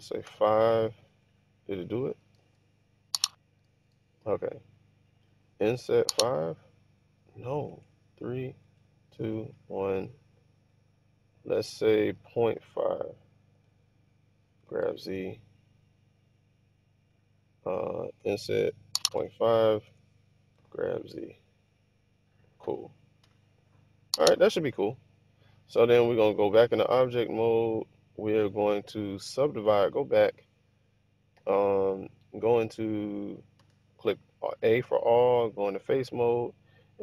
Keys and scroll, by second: 0.3 5, 2.5 super+z, 3.8 super+z, 5.7 i, 6.1 5, 7.8-9.5 typing, 12.0 BackSpace, 12.2 ., 12.6 5, 13.6 Return, 14.5-16.3 typing, 18.3-21.0 typing, 19.9 Return, 23.3 1, 24.7 typing, 26.0 Tab, 29.7 Tab, 33.7 a.